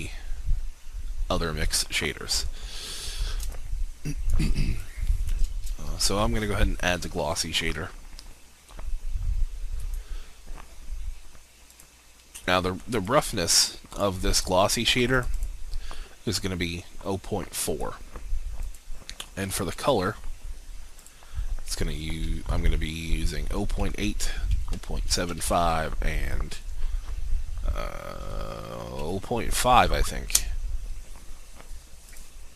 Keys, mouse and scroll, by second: 3.5 alt+shift+click, 5.8 shift+a, 9.8-14.1 drag, 24.1 Tab, 24.5 0, 25.1 7, 25.3 5, 25.7 Tab, 29.0 0, 29.5 5, 30.3 Return, 32.1 click.